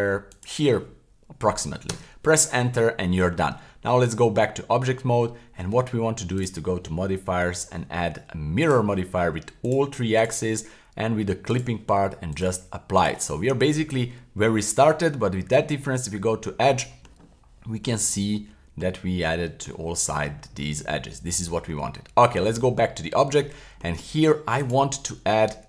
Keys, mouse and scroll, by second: 2.7-4.4 middle drag, 3.5 Tab, 4.6-5.5 middle drag, 8.7 click, 9.6-10.3 drag, 11.5 click, 12.3-13.0 drag, 13.3 scroll down 2, 13.5-14.7 middle drag, 14.7 scroll down 1, 14.9 middle click, 15.5 Tab, 16.7 middle click, 17.2 middle click, 18.0 middle click, 19.4 middle click, 19.8 middle click, 20.3 scroll up 2, 20.6 middle click, 21.1 middle click, 21.8 Tab, 22.9-23.4 scroll down 2, 23.4 middle click.